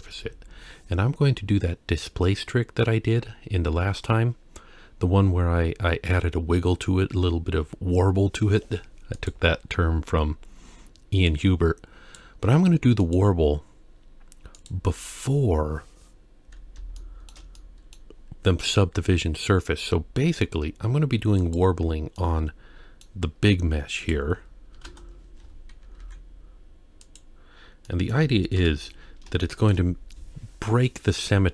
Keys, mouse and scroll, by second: 11.3-12.2 drag, 13.0-14.7 drag, 15.3-16.0 scroll up 2, 17.0-17.3 shift+middle drag, 17.6-17.9 middle drag, 21.4 click, 22.2-23.0 middle drag, 24.0 click, 26.0 ctrl+a, 27.9 middle click, 28.6 KP_1, 29.1 scroll up 1, 29.5 shift+middle click, 31.3-31.5 middle drag.